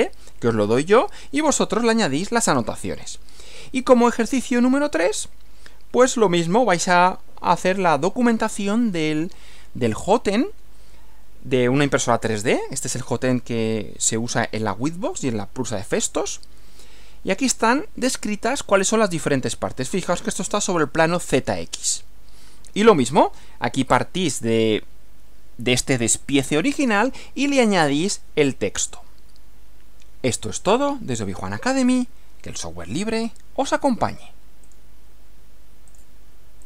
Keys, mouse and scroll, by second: 5.1 Right, 22.9 Right, 34.7 click, 35.9 click, 36.6 click.